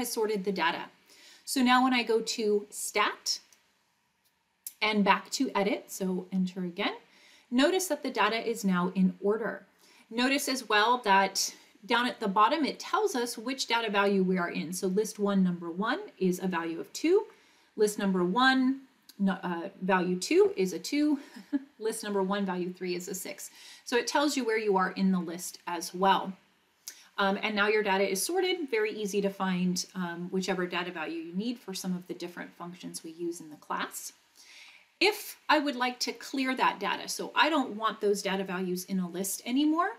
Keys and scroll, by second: 6.3 Return, 17.2 Down, 21.0 Down, 34.6 Up.